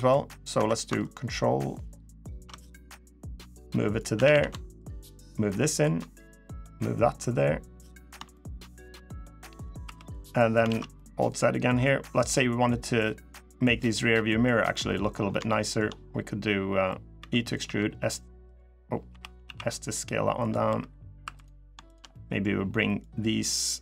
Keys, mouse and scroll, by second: 0.8 ctrl+right click, 2.8 click, 3.9 a, 4.1 a, 4.5 ctrl+right click, 6.2 click, 7.8 scroll down 1, 8.1 shift+middle click, 8.7 middle click, 9.6 3, 9.9 click, 10.4 alt+z, 10.7 middle click, 11.7 scroll down 3, 12.0 middle click, 12.5-13.1 scroll up 3, 12.8 middle click, 13.6 click, 13.9 middle click, 14.9 scroll up 5, 15.2 shift+middle click, 15.6 shift+scroll up 1, 15.8-16.5 scroll down 1, 16.5-16.8 scroll down 2, 16.9 e, 17.4 s, 18.8 o, 19.2 s, 20.4 3, 21.0 2, 21.1 click, 21.6 shift+click, 21.9 middle click, 22.7 click.